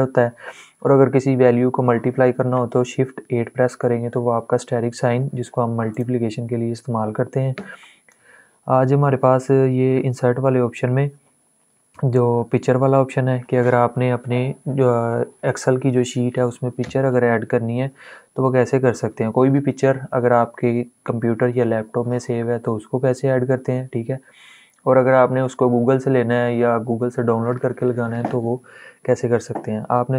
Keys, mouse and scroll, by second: 5.6 click.